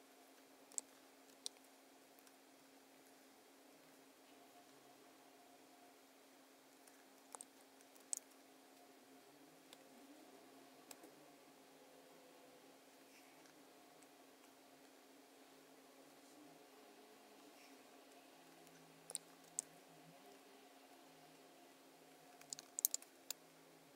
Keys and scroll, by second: 1.3 super+F9, 7.9 super+F9, 9.7 space, 19.4 super+F9, 22.6 super+=, 22.9 space.